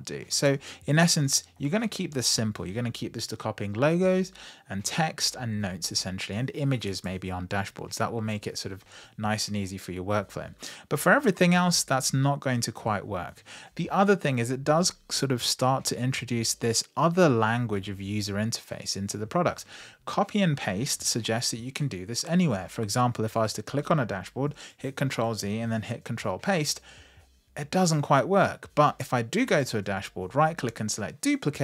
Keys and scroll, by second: 24.5 super+c, 29.0 super+v.